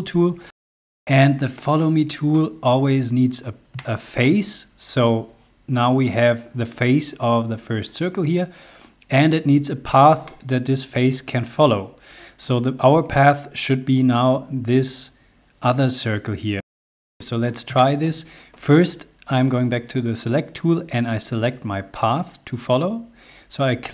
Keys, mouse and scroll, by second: 1.0 middle click, 3.7 shift+middle click, 9.1 scroll up 1, 16.6 shift+Num_Lock, 16.6 shift+middle click, 16.6 shift+scroll up 2, 16.9 space, 17.7 shift+middle click, 17.9 shift+middle click, 18.1-19.5 middle drag, 22.3-23.4 drag.